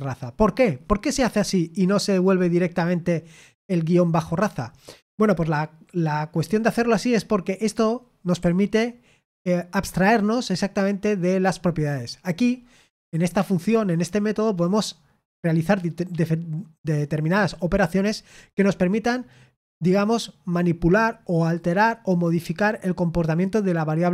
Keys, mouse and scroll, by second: 3.5 k, 8.3 j.